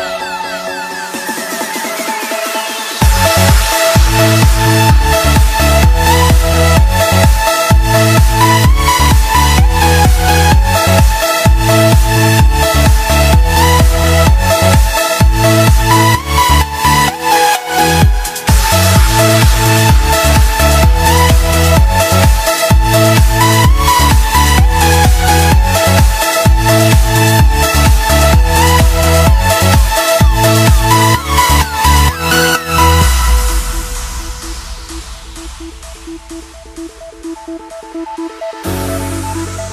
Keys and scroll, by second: 14.5 ctrl+=, 20.6 ctrl+=, 21.1 ctrl+=, 23.8 space, 24.8 space, 25.6 space, 26.6 space, 27.9 ctrl+z, 30.1 space, 31.1 space, 32.6 space, 33.6 space, 37.2 ctrl+z, 38.5 ctrl+z.